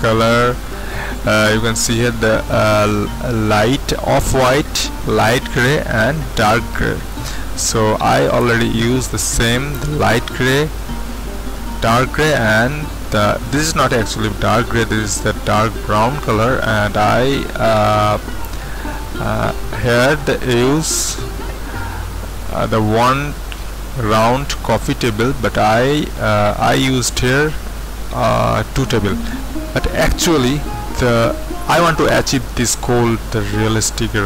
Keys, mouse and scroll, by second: 12.8-14.5 middle drag, 14.5-24.8 scroll up 2, 24.8-25.3 scroll down 2, 25.3 middle click, 26.1-26.9 scroll up 2, 26.9-34.2 middle drag.